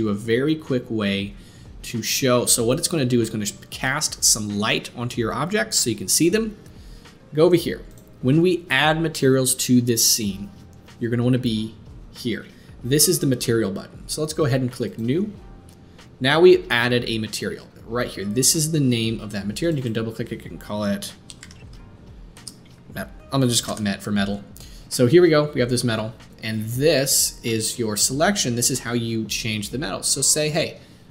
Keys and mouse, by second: 1.9-2.5 drag, 2.5-14.8 middle drag, 14.8-31.1 drag.